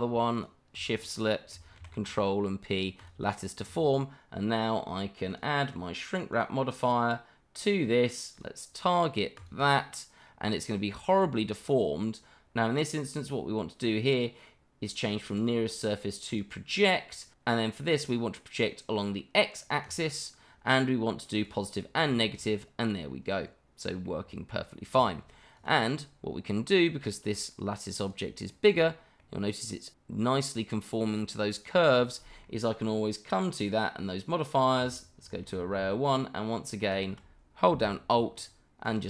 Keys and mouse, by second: 0.3 shift+click, 1.8 ctrl+p, 3.6 click, 5.3-6.4 drag, 8.3 click, 9.3 click, 10.2-10.6 middle drag, 11.0 shift+middle click, 15.2-16.4 drag, 17.4 middle drag, 18.9 middle drag, 21.4 click, 22.2 shift+middle drag, 22.5-24.0 middle drag, 24.3 shift+middle drag, 25.0 shift+middle drag, 25.5 click, 28.0 shift+click, 28.5 shift+middle drag, 29.2-32.4 middle drag, 38.4 alt+click, 38.8 alt+click.